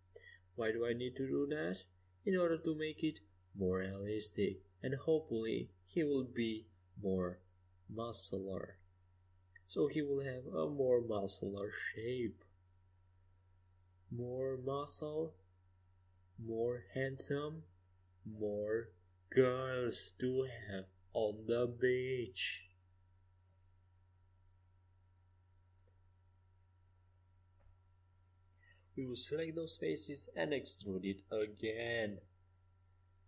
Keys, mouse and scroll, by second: 1.3 g, 5.3-8.7 right drag, 5.5 g, 9.3-13.4 middle drag, 16.4 middle click, 20.0 KP_5, 20.1 KP_1, 20.6 KP_3, 20.8 KP_5, 23.0 Tab, 23.8 Tab, 24.5 z, 26.2 Tab, 26.6 Tab, 28.5-31.8 drag, 29.4-32.3 right drag, 32.3 middle click, 33.1 e.